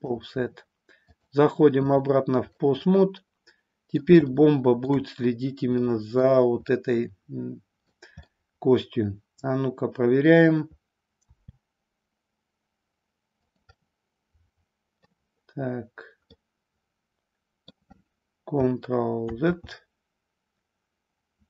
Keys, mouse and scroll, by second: 1.2-2.1 drag, 2.4-4.1 middle drag, 4.3 shift+middle click, 5.7-6.3 middle drag, 6.7-7.9 middle drag, 8.4-10.3 middle drag, 11.2 r, 13.9-15.1 middle drag, 16.3-17.8 middle drag, 19.3 ctrl+z.